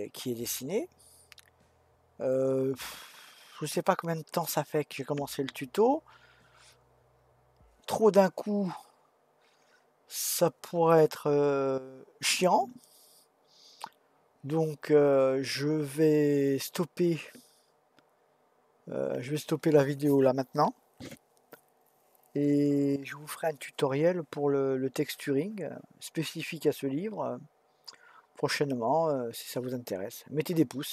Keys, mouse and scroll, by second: 1.7-2.3 scroll up 1, 10.9-14.0 middle drag.